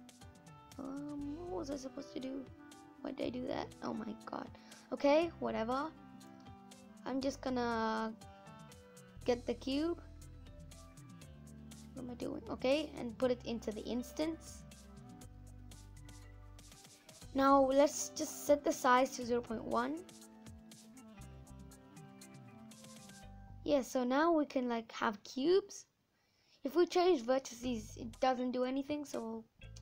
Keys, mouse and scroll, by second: 1.5 click, 2.7 click, 12.7 click, 13.1 scroll down 3, 13.3-14.4 middle drag, 14.4 scroll up 3, 14.9-19.5 middle drag, 19.5 click, 20.1 scroll up 3, 20.2 middle click, 20.6-20.9 scroll down 2, 20.9-23.2 middle drag, 23.2-23.5 scroll up 1, 23.5-25.5 scroll down 3, 25.5-27.0 scroll up 4, 27.0-29.8 drag.